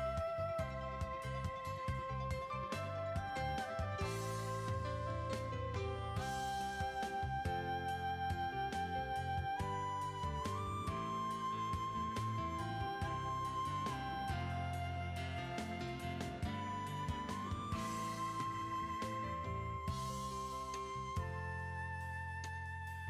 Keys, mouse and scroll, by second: 12.4 alt+scroll down 1, 12.9 space, 13.8 alt+scroll down 1, 14.1 space, 17.1 alt+scroll down 1, 18.3 alt+shift+click, 21.4 alt+scroll up 1, 22.1 space, 22.9 alt+scroll up 1.